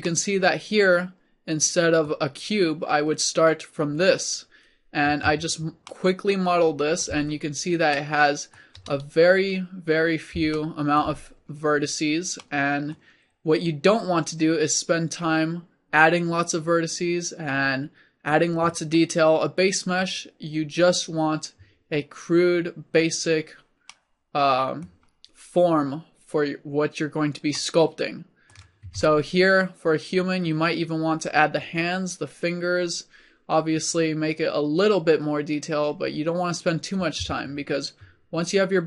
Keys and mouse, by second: 5.1 Tab, 7.1 a, 12.1 middle click, 24.4-25.5 middle drag, 28.9 Tab.